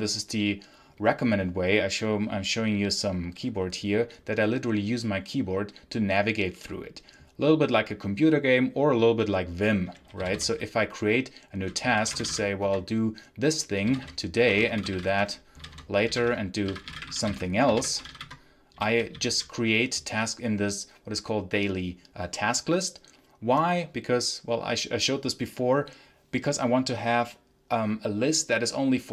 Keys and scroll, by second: 10.1 n, 11.5-12.7 typing, 13.7-19.0 typing.